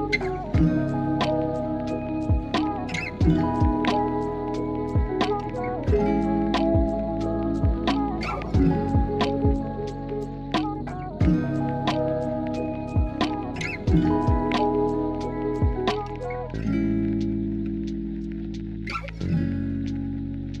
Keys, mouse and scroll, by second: 1.3 Tab, 1.6 Tab, 9.2-10.4 middle drag, 11.0 KP_1, 11.6 alt+z, 13.2 shift+middle click, 14.3 g, 15.6 g, 19.4 shift+v.